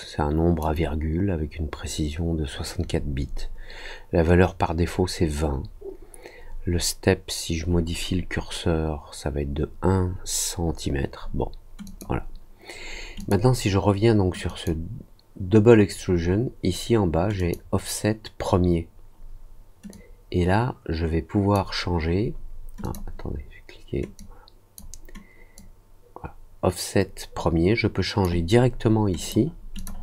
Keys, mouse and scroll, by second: 11.8 click, 13.1 click, 14.4 click, 17.3 click, 19.8-21.5 drag, 22.8 click, 24.1 click, 25.5-28.2 drag, 29.1 click, 29.7 click.